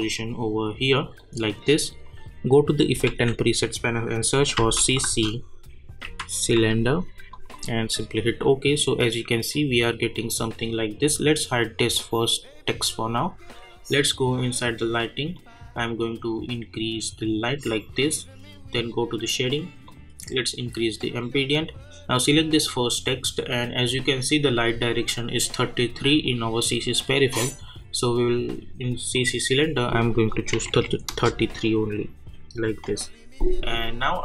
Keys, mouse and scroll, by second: 3.1 ctrl+a, 4.6-7.0 typing, 7.3 click, 11.9-22.1 drag, 27.6 click, 31.1 Return.